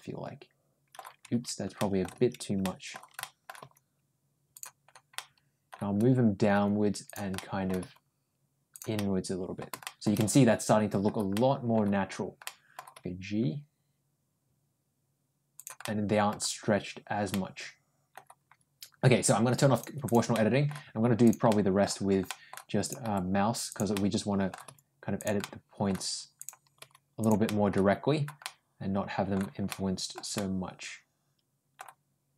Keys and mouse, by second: 1.6 middle click, 2.5 ctrl+middle click, 3.0 ctrl+middle click, 3.5 ctrl+g, 5.0 middle click, 6.4 g, 7.2 middle click, 7.6 g, 8.8 middle click, 9.7 middle click, 10.0 middle click, 11.2 middle click, 12.3 middle click, 12.8 g, 15.7 middle click, 17.1 middle click, 19.6 click, 20.2 middle click, 21.3 middle click, 22.1 middle click, 22.6 click, 22.9 g, 23.8 middle click, 24.5 g, 25.2 middle click, 26.3 click, 26.6 g, 27.3 middle click, 28.3 middle click, 29.5 middle click, 30.2-31.6 middle drag.